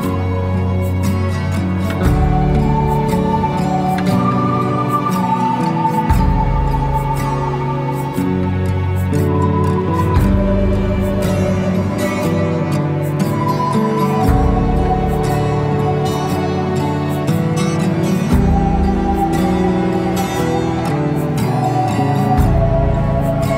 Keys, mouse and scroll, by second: 0.1-0.6 scroll up 1, 1.3 click, 3.1 click, 3.6 shift+click, 4.2 click, 7.0 click, 7.5 click, 8.2 shift+click, 8.7 shift+click, 10.0 e, 12.0 click, 12.8 shift+click, 13.6 e, 15.6-17.6 scroll down 2, 18.0-19.0 drag, 19.0-21.4 middle drag, 21.4 click, 23.3 click.